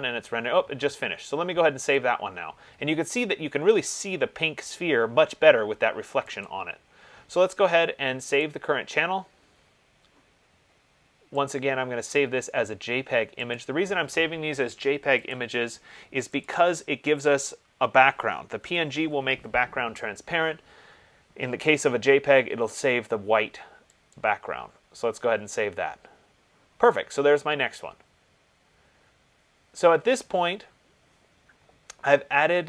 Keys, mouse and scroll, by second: 3.3 click, 6.7 click, 8.6 click, 11.8 click, 13.7 click, 15.6 click, 17.7 click, 18.9 BackSpace, 24.4 click.